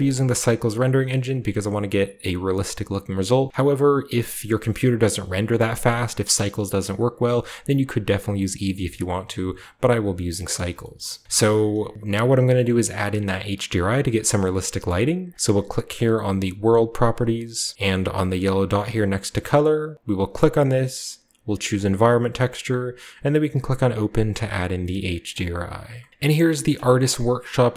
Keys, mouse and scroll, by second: 2.5 click, 10.5 shift+middle drag, 10.9-11.9 shift+scroll up 2, 10.9 shift+middle click, 11.2-12.5 shift+middle drag, 11.9-12.5 shift+scroll up 1, 12.6-16.5 middle drag, 16.5 click, 19.9 click, 21.7 click, 26.1-27.7 drag.